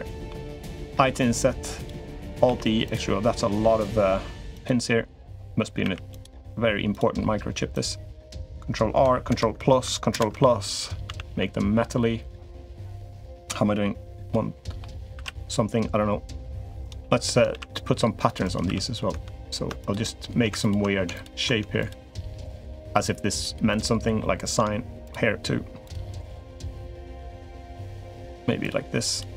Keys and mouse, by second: 0.7 i, 2.2 alt+e, 5.6 alt+e, 7.5 click, 9.1 ctrl+KP_Add, 9.9 ctrl+KP_Add, 10.8 a, 11.1 g, 14.1 middle click, 14.9 ctrl+r, 16.8 3, 17.3 ctrl+r, 18.5 3, 19.6 shift+middle click, 20.4 ctrl+click, 21.0 ctrl+click, 21.6 shift+click, 22.1 shift+click, 22.7 shift+click, 23.1 shift+click, 23.5 shift+click, 24.8 shift+click, 25.6 shift+click, 26.0 shift+click, 26.6 shift+click, 27.0 shift+click, 27.8 shift+click, 28.1 shift+click, 28.4 shift+click, 28.9 shift+click, 29.2 shift+click.